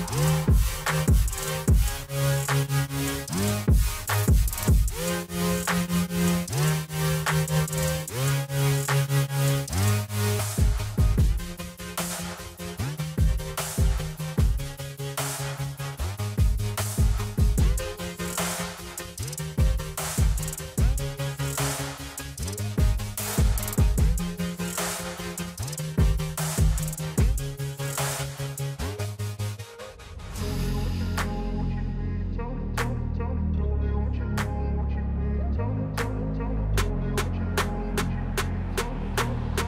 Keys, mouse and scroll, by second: 0.6 space, 0.6 click, 1.2 alt+scroll down 1, 3.1-6.7 drag, 7.6-10.0 drag, 10.3-14.0 drag, 14.0-17.0 alt+drag, 17.0-19.5 drag, 19.5-20.1 scroll down 1, 20.5 alt+click, 22.3-24.4 drag, 26.0 alt+scroll up 1, 26.6 click, 27.6 space, 27.7-33.5 drag, 33.5 alt+scroll down 1, 35.3-37.6 drag.